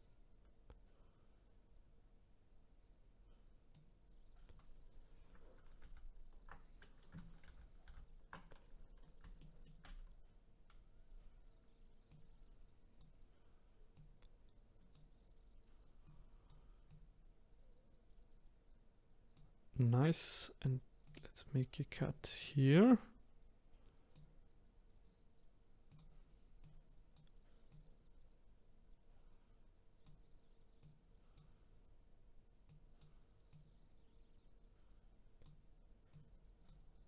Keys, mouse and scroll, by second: 9.4-11.0 shift+middle drag, 11.0-12.1 scroll down 1, 12.1 click, 13.9 click, 16.0 click, 16.9 click, 21.0-25.1 drag, 25.9 click, 27.7 click, 30.8 click, 32.7 click, 33.5-37.0 drag.